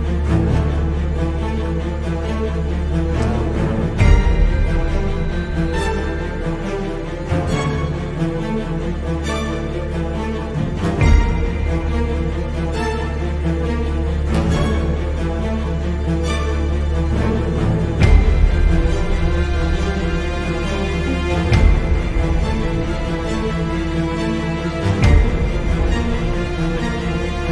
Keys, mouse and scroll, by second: 5.4 click, 5.7 Tab, 6.0 click, 6.5 click, 6.8 click, 7.2 scroll down 1, 7.4 middle click, 7.9 scroll up 1, 8.3 click, 9.3 Delete, 9.6 click, 9.9 click, 10.1 Delete, 10.5 scroll down 1, 10.7 click, 10.9 Tab, 11.6-17.8 middle drag, 13.3 ctrl+i, 14.3-14.7 scroll up 2, 16.3 e, 17.8 click, 18.3 x, 18.8 Escape, 19.0 z, 19.3 scroll up 2, 19.5-22.4 shift+middle drag, 19.9-20.6 scroll up 2, 20.6-21.1 scroll up 1, 21.1 g, 22.4 click, 22.6-23.9 scroll down 4, 22.8-26.3 shift+middle drag, 23.9 `, 24.3 Escape, 25.0 z, 25.2-26.3 scroll down 2, 26.3 click, 26.7 click, 27.0-27.5 shift+middle drag.